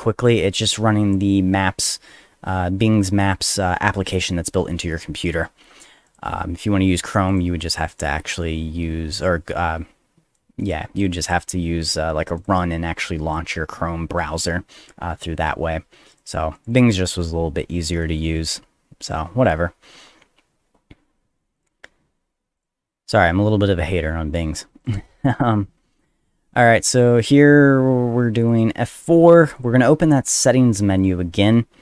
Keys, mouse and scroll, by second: 0.0-1.1 drag, 5.7 click, 7.1 click, 7.3 click, 7.9 click, 9.2-10.3 drag, 10.6 click, 11.0 click, 11.2 click, 11.4 click, 12.4 click, 13.0 click, 16.1 click, 16.5 click, 16.7 click, 18.4 click, 20.4 middle click, 21.6 click, 22.1 middle click, 22.6 click, 23.9 middle click, 24.8 click, 28.4 click, 29.4 click.